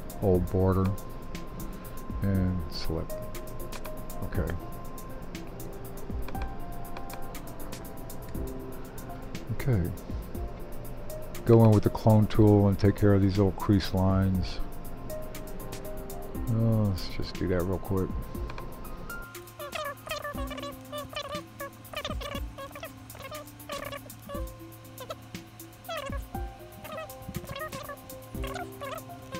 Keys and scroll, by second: 28.8 super+e.